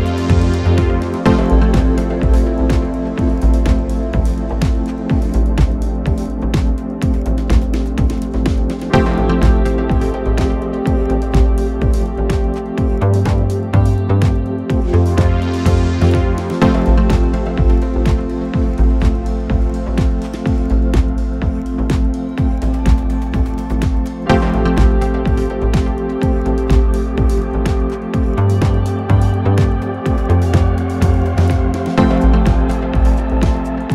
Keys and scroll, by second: 0.9 3, 1.1 ], 1.9 ], 10.5 4, 15.0 2, 15.5 ], 16.1 ], 17.4 4, 26.7 3, 26.8 4, 32.3 3.